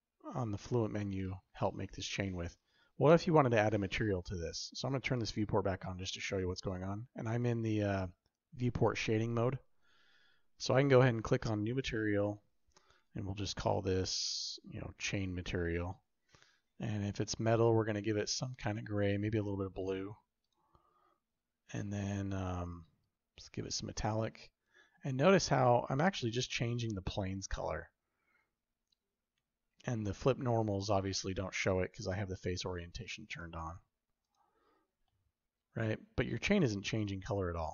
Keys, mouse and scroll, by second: 5.1 click, 11.2 click, 14.0 click, 14.3-16.6 drag, 22.9-24.6 drag, 25.9-26.3 shift+middle drag, 26.5-29.5 shift+middle drag, 29.9 shift+middle click, 32.9-34.5 drag, 34.9-36.0 shift+middle drag.